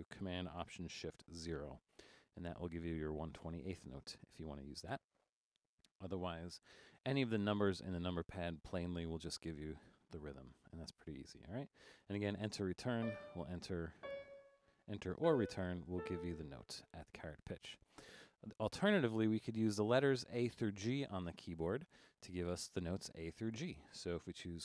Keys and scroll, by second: 1.5 alt+shift+super+0, 7.8 4, 13.6 Down, 14.8 Down, 15.2 Return, 15.6 Down, 15.9 Return.